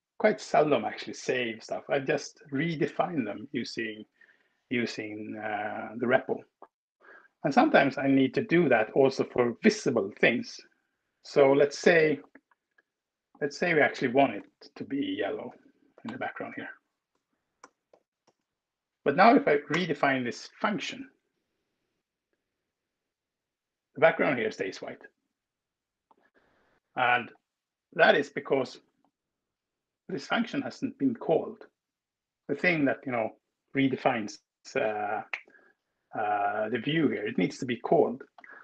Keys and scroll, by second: 14.3 ctrl+w, 15.3-18.1 typing, 19.4 alt+Return, 22.0 Escape.